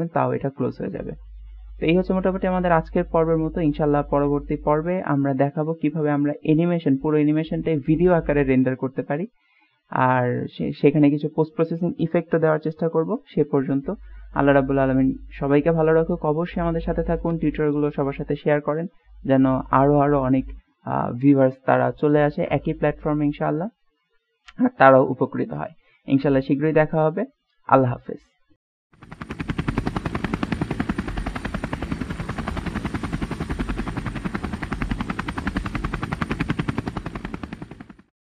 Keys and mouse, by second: 2.0 middle drag, 2.4-5.9 middle drag, 6.6-13.8 drag.